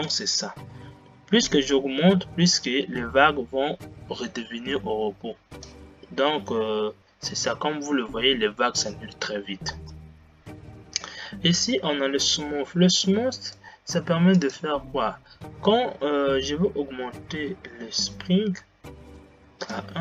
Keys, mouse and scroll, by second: 0.3-10.3 drag, 10.3 space.